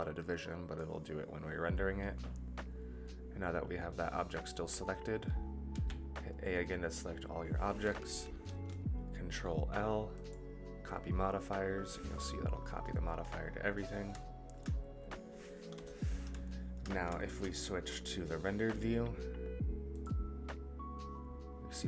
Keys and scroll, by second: 5.7 a, 8.4 ctrl+l, 15.7 KP_0.